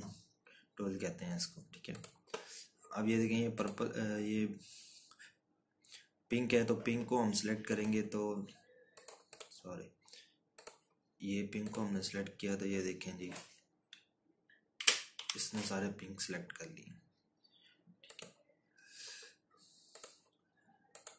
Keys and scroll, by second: 15.6 Down.